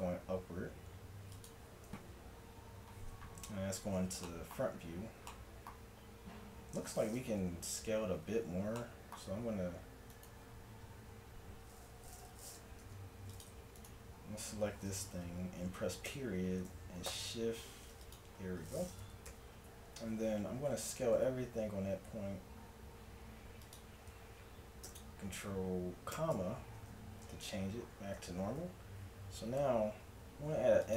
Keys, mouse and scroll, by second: 2.4-3.5 middle drag, 3.5 KP_1, 7.7 a, 8.0 a, 9.4 s, 12.8 ctrl+Tab, 16.1 ., 17.2 shift+s, 19.3 KP_1, 20.1 a, 20.6 a, 21.1 s, 24.1 a, 26.1 ctrl+,, 27.5 a, 28.4 a, 30.4 ctrl+r.